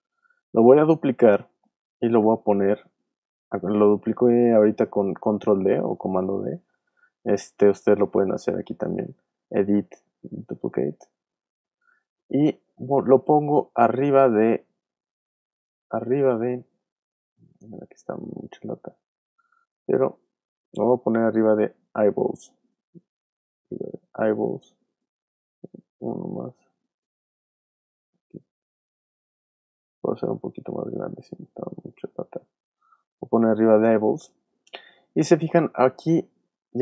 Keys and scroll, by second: 0.0 super+z, 2.2 super+d, 6.7 super+z, 27.4 super+z.